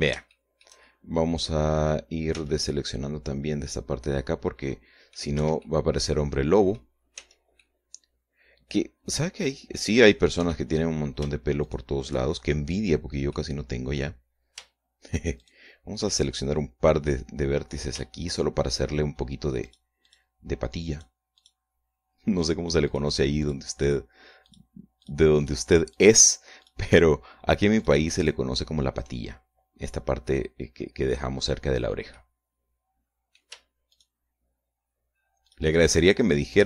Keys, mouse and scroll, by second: 2.8 c, 3.2-5.8 drag, 5.9 Escape, 6.1-7.4 drag, 7.6 c, 8.1-10.9 drag, 10.9 Escape, 10.9 middle click, 12.2 shift+right click, 12.4-13.4 shift+middle drag, 13.4 scroll up 2, 13.8 middle click, 14.8 scroll up 1, 15.9 shift+right click, 18.8 shift+right click, 20.2 shift+right click, 20.6 shift+right click, 21.4 shift+right click, 21.9 shift+right click, 22.9 shift+right click, 23.4 shift+right click, 24.0 shift+right click, 24.4 shift+right click, 25.0 shift+right click, 25.6 shift+right click, 25.9 shift+right click, 26.4 shift+right click, 27.2 shift+right click, 28.3 shift+right click, 28.8 shift+right click, 32.6-34.1 middle drag, 34.4 shift+right click, 36.0 shift+right click.